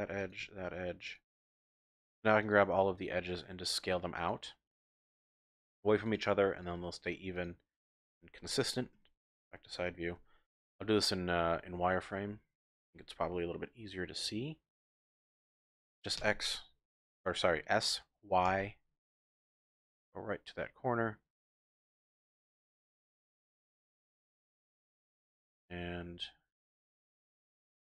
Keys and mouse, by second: 0.2 alt+shift+click, 1.1 alt+shift+click, 3.7 alt+shift+click, 4.3 alt+shift+click, 4.9 alt+shift+click, 5.3 alt+shift+click, 6.0 alt+shift+click, 7.4 alt+shift+click, 7.8 alt+shift+click, 8.9 KP_3, 10.1 z, 10.9 z, 11.5 z, 16.2 s, 18.4 y, 21.8 click, 24.3 ctrl+r, 27.3 click, 27.6 ctrl+r.